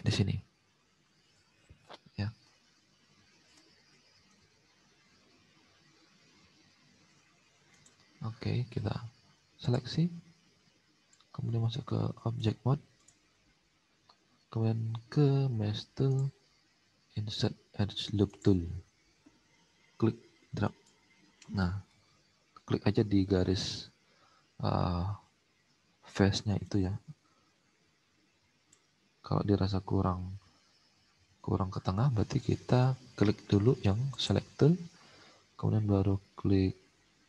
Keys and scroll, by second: 0.7 5, 4.3 ctrl+z, 4.9 ctrl+z.